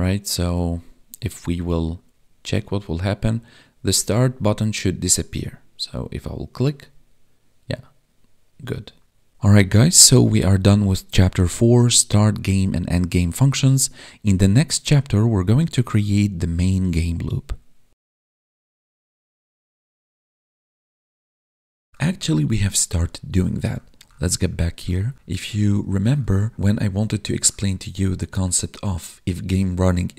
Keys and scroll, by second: 0.5 Tab.